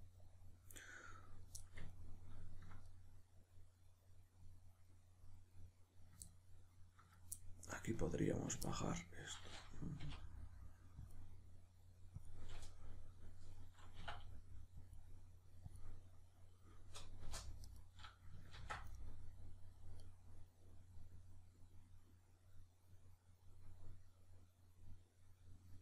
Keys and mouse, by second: 10.0 k, 17.6 right click, 18.6 ctrl+x, 19.0-25.8 middle drag.